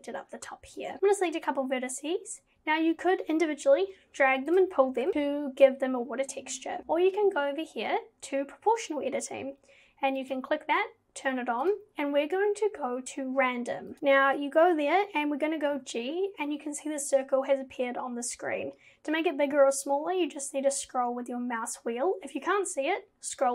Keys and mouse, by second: 0.8 click, 1.1 click, 3.7 g, 5.1 ctrl+z, 10.2 click, 11.7-14.0 drag, 15.8 g.